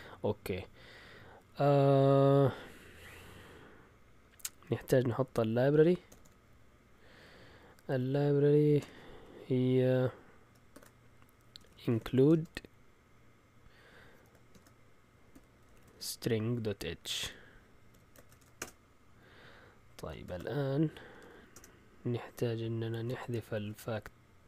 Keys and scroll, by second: 4.6 Escape, 6.1 typing, 8.8 typing, 10.7-12.6 typing, 14.5-18.7 typing, 20.2 ctrl+l, 20.9-21.6 typing, 22.7-24.4 typing.